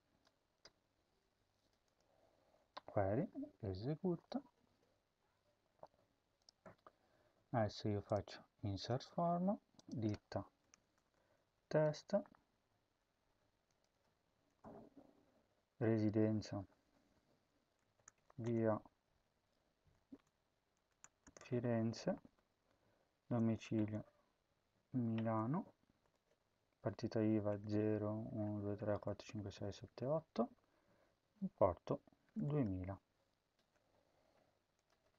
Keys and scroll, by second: 0.2 BackSpace, 0.5 BackSpace, 2.5 ctrl+s, 10.5-11.7 typing, 14.3-15.0 typing, 17.6-18.6 typing, 19.9-25.9 typing, 26.3 Tab, 27.2-30.2 typing, 30.4 Tab, 31.9-33.6 typing.